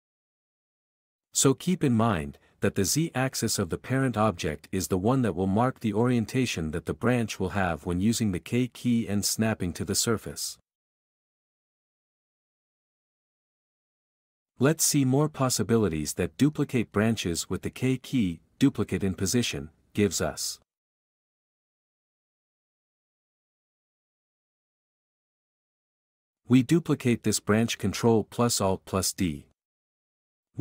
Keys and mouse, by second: 0.6 k, 0.9 s, 1.0 click, 6.6 shift+click, 8.7 x, 11.4 q, 12.5 alt+a, 22.9 ctrl+z, 23.4 b, 23.5 click, 24.2 x, 26.7 ctrl+a, 27.1 g, 27.5 Tab, 27.7 s, 28.0 Tab, 28.4 g, 29.9 s, 30.3 r.